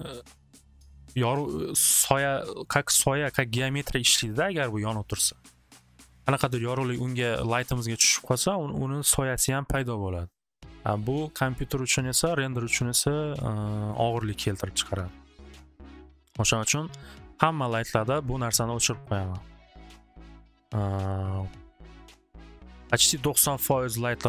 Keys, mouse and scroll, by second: 14.1 click, 15.6-19.3 drag.